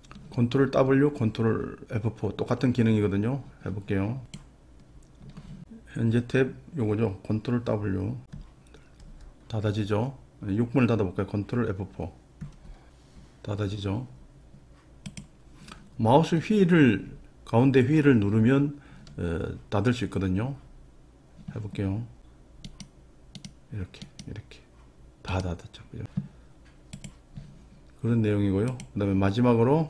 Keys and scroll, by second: 0.0 ctrl+F4, 9.1 ctrl+w, 12.4 ctrl+F4.